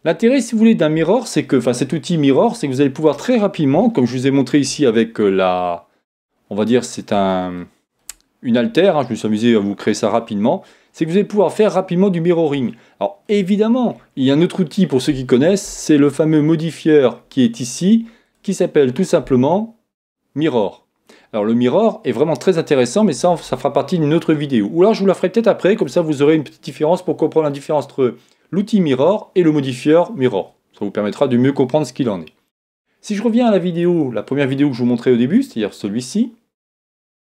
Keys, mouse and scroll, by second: 0.5-14.6 middle drag, 17.6 click, 33.8-37.2 drag.